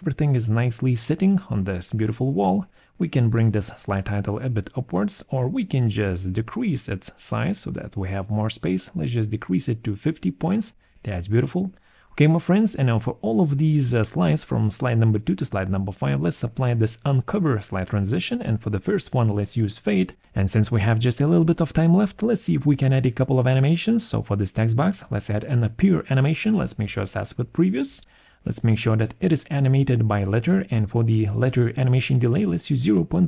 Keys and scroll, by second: 4.6 6, 4.8 0, 5.0 Return, 6.0 BackSpace, 8.6 5, 8.7 0, 9.0 Return, 20.4 ctrl+shift+g, 30.0 BackSpace, 30.5 4, 31.4 BackSpace, 31.5 3.